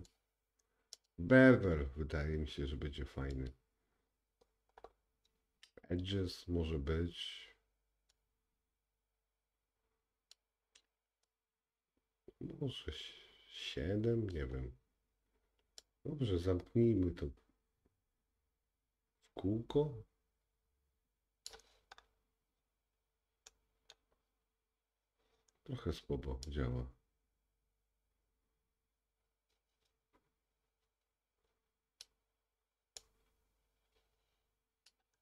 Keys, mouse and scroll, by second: 0.0 click, 1.0-8.2 drag, 15.8 click, 22.0-23.6 scroll up 2, 23.6 middle click, 23.6-24.3 scroll up 1, 24.3-25.1 scroll down 3, 26.5 click, 33.1 click.